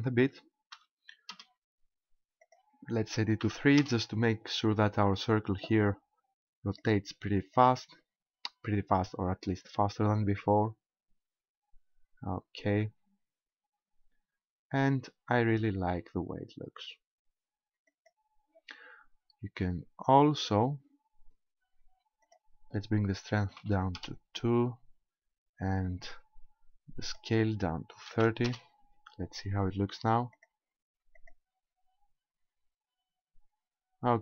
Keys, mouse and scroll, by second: 2.4 click, 6.8 click, 7.6 click, 17.9 click, 22.2 click, 27.0 click, 30.4 click, 31.2 click.